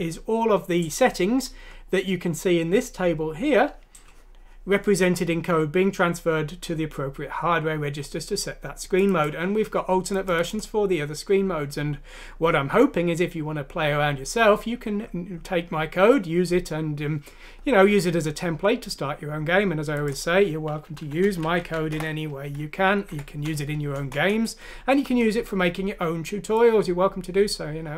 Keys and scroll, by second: 21.3 shift+Home, 21.5 ;, 23.1 F6, 24.0 Return.